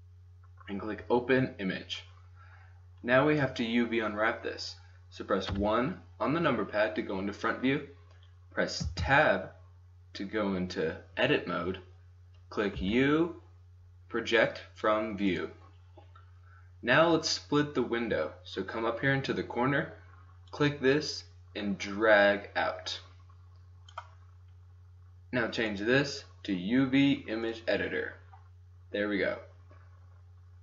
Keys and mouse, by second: 0.0-1.5 drag, 5.2 middle click, 5.5 KP_1, 8.8 Tab, 11.6 middle click, 12.7 u, 13.7-16.3 drag, 20.4-22.4 drag, 22.4 middle click, 25.7-27.6 drag.